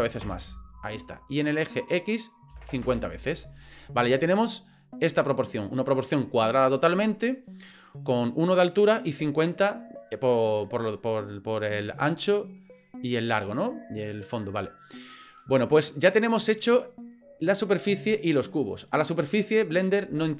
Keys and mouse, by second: 1.9-3.2 drag, 3.9-6.1 middle drag, 7.6-8.1 middle drag, 9.3 middle drag, 12.2-12.6 middle drag, 12.9-14.4 middle drag, 14.5 middle click, 16.0-16.6 middle drag, 18.6 middle drag.